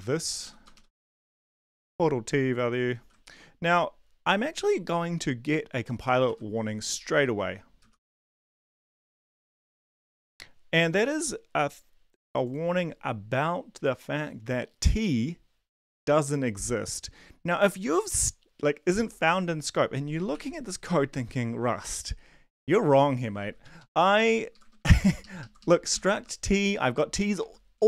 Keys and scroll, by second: 0.0-0.7 typing, 0.4 Left, 0.9 Right, 1.1 Right, 1.5 Delete, 1.7 Right, 2.4 End, 3.0 ctrl+s, 6.2 ctrl+`, 7.6-9.8 typing, 20.3 ctrl+`, 23.8 Up, 24.8 Left, 24.8 Right, 25.4 ctrl+shift+Left, 25.9 ctrl+shift+Right, 27.4 Right, 27.8 Down.